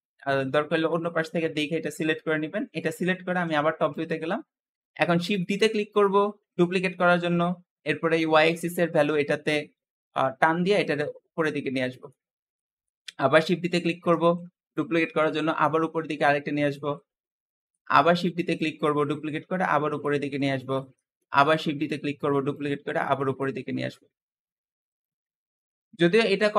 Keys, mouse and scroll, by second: 3.3 KP_7, 4.1-4.9 scroll up 1, 4.9 shift+middle click, 5.5 shift+d, 8.0 click, 11.6-13.1 shift+middle drag, 13.1 shift+d, 14.6 click, 17.6 shift+middle click, 17.9 shift+d, 19.0 click, 20.8 shift+middle click, 21.2 shift+d, 22.4 click, 25.1-25.5 scroll down 3, 25.5-26.5 middle drag.